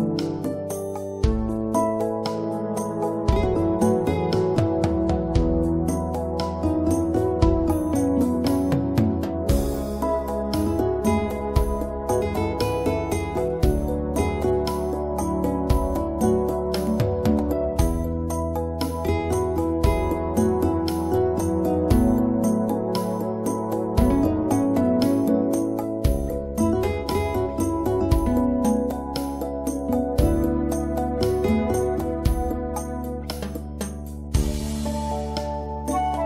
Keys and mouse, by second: 5.8 middle click, 10.3-13.1 drag, 16.6 click, 17.5-18.6 right drag, 18.6-19.9 drag, 19.9-21.5 middle drag, 21.5 right click, 21.8 middle click, 22.4-26.1 right drag, 31.4 middle click, 31.9-34.4 drag.